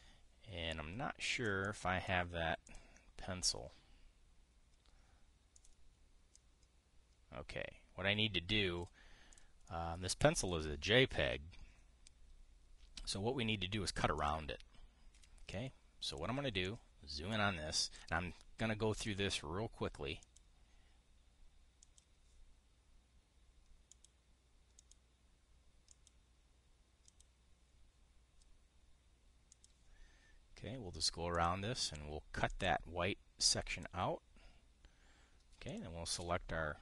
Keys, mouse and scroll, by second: 2.0 click, 2.3 click, 3.4 click, 4.1 click, 6.2 click, 7.0-9.6 drag, 10.0 click, 10.4-10.7 drag, 11.1 click, 14.8 click, 15.9 Delete, 16.8 click, 17.4 click, 19.7 click, 20.9 click, 22.5 click, 24.6 click, 25.5 click, 26.6 click, 27.8 click, 30.2 click, 32.0 click, 33.2 click, 34.4 click.